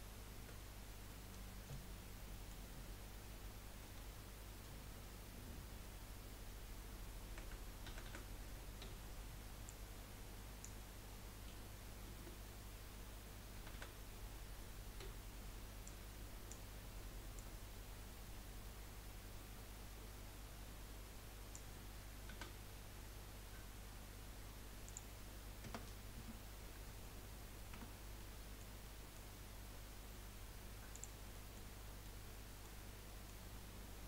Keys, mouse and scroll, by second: 0.3 KP_1, 1.1-2.1 middle drag, 2.1 scroll down 1, 2.3-3.8 middle drag, 3.8 KP_7, 5.3 scroll up 1, 7.4 a, 7.9 a, 8.0 a, 8.8 b, 11.5 z, 13.5 a, 13.7 a, 15.0 b, 17.3 click, 22.3 a, 24.8-27.8 drag, 27.8 Tab, 28.1-31.0 middle drag, 31.0 click, 31.3-31.7 middle drag, 31.7 scroll up 4, 32.1-32.8 middle drag, 32.8 scroll down 3, 33.1-33.4 middle drag, 33.4 scroll up 2.